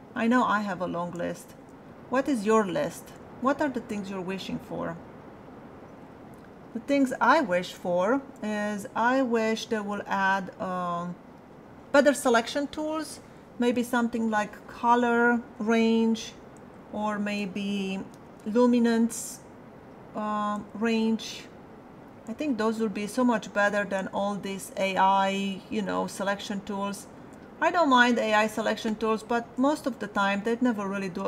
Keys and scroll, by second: 18.1 alt+[.